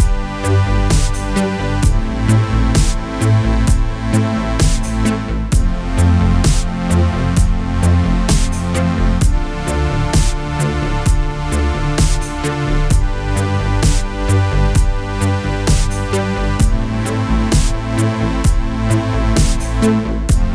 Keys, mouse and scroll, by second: 0.3 alt+v, 1.2 middle click, 1.7 a, 3.8 click, 5.7-9.7 drag, 12.2 click, 13.0-17.6 middle drag, 19.3-20.4 drag, 20.4-20.5 middle drag.